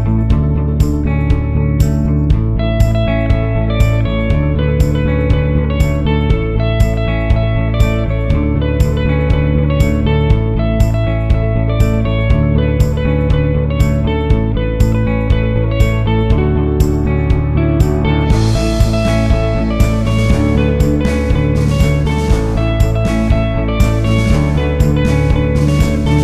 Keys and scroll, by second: 21.4 Right, 23.2 Left.